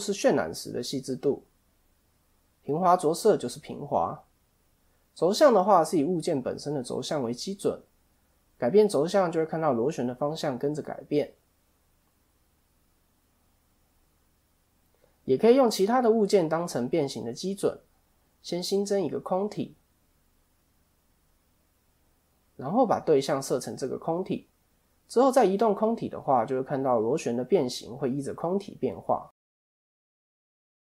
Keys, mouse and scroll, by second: 2.9 click, 3.7 click, 8.6 click, 9.7 middle click, 11.5 click, 13.5 click, 18.1 Tab, 18.8 shift+a, 21.4 right click, 22.8 click, 24.8 click, 26.9 click, 29.1-29.5 scroll down 3, 29.5 middle click, 30.2 right click.